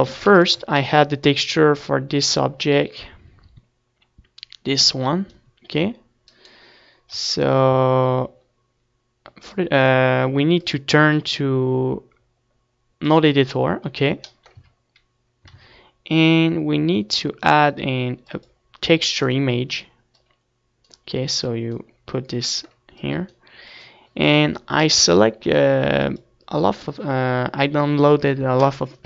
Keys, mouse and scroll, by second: 0.5 KP_3, 0.9 z, 2.6-3.6 drag, 3.7 ctrl+s, 4.7 KP_1, 5.0 middle click, 5.3 a, 5.6 ctrl+s, 7.5-9.2 drag, 10.2-12.1 drag, 12.1-13.4 right drag, 12.5 z, 13.1 Tab, 13.5 Tab, 14.9-23.7 drag, 23.7 shift+a.